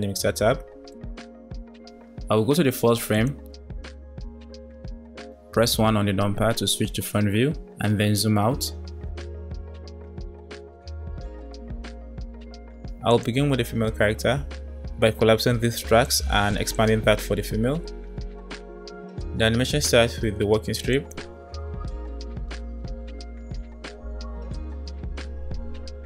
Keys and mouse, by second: 3.0 click, 6.1 KP_1, 10.4 space, 11.1 space, 13.1 click, 16.0 click, 21.0 click, 21.2 space, 24.7 space, 25.7 space.